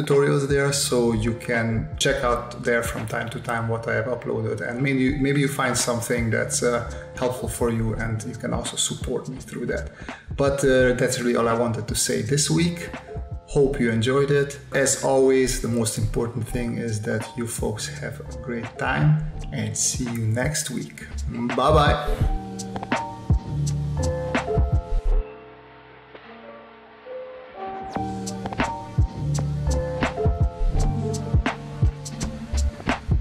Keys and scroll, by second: 0.0-0.1 typing, 1.7 space, 2.4 v, 2.7 space, 3.8 s, 4.4 space, 6.1 space, 7.2 space, 8.2 space, 9.3 space, 10.6 s, 11.2 s, 11.8 space, 12.7 space, 14.0 space, 15.9 space, 17.1 space, 17.5 s, 18.6-21.6 typing, 25.2 s, 29.5 space, 30.8-33.2 typing.